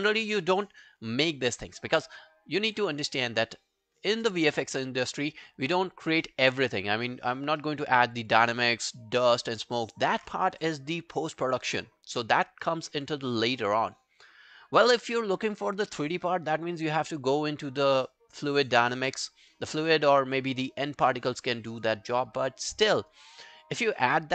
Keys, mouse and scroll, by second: 7.6 alt+middle click, 8.0 alt+scroll down 1, 8.2 alt+click, 9.3 alt+middle click, 9.7 alt+right click, 12.7 alt+middle click, 13.0 alt+right click, 13.2 alt+click, 13.6 alt+middle click, 13.9 alt+scroll down 1, 14.1 alt+click, 20.4 alt+middle click, 20.7 alt+right click, 21.0 alt+click, 21.8 alt+middle click, 22.0 alt+right click, 22.3 alt+click, 22.7 alt+middle click, 23.0 alt+right click, 23.2 alt+click.